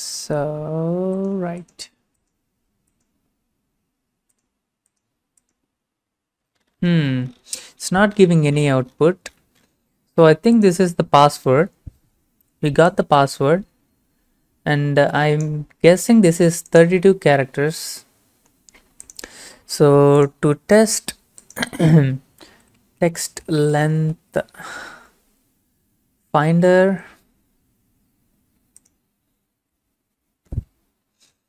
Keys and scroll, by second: 22.2-24.8 typing.